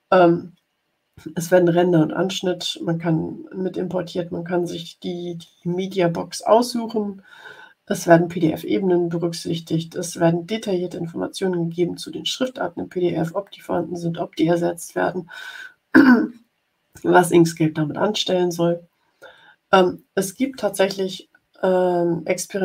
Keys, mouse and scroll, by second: 21.4 ctrl+scroll up 2, 22.2 ctrl+scroll up 2.